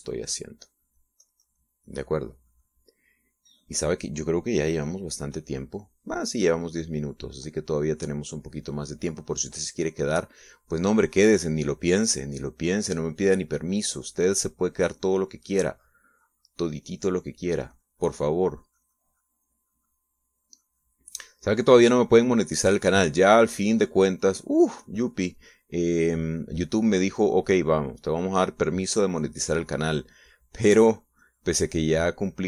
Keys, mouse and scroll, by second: 0.4-1.6 middle drag, 1.9-5.2 drag, 6.2 click, 6.8 click, 7.9-11.7 drag, 11.7 click, 12.9-26.0 drag, 26.1-31.4 drag, 31.5-32.4 drag.